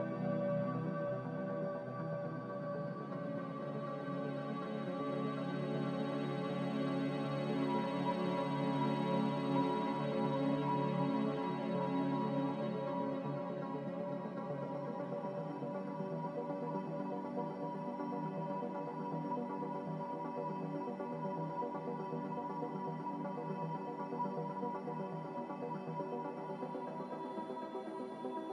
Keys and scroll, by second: 3.2 a, 3.8 Delete, 6.4 Delete, 19.3 5, 22.0 7, 22.7 BackSpace, 26.9 Return, 26.9 8.